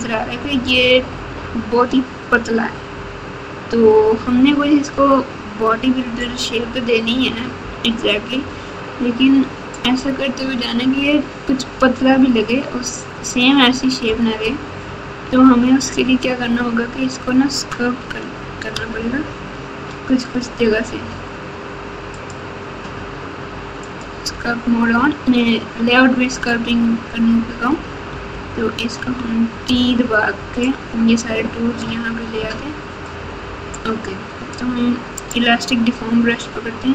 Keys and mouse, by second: 18.7 ctrl+Tab, 22.1-24.0 drag, 28.1 n, 28.9 n, 29.9 t, 35.3 click.